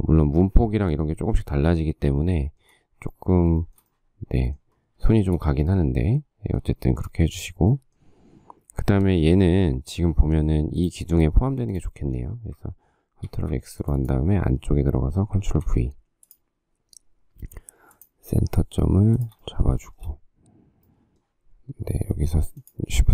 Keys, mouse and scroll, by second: 2.4 shift+middle click, 3.8 shift+middle click, 3.9 shift+middle click, 5.3 shift+middle click, 11.1 click, 11.9 click, 13.6 ctrl+x, 15.7 ctrl+v, 19.3 shift+click, 20.0 shift+middle click.